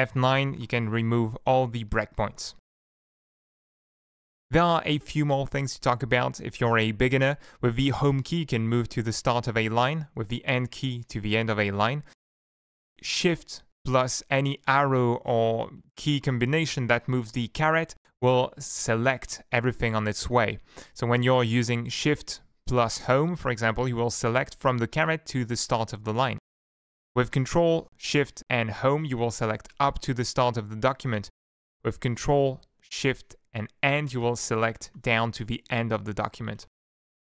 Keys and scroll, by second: 1.2 ctrl+shift+F9, 8.1 Home, 10.5 End, 18.3 shift+Home, 20.0 shift+Home, 20.5 shift+End, 20.8 shift+End, 21.1 shift+Home, 30.0 ctrl+shift+Home, 34.1 ctrl+shift+End, 36.6 Home.